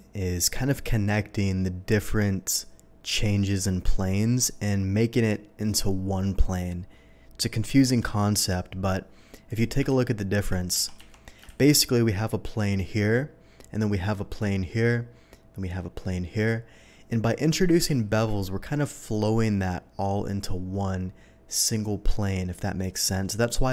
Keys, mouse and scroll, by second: 9.4 click, 9.8 ctrl+z, 10.6 ctrl+z, 11.5 ctrl+shift+z, 17.9 ctrl+shift+z.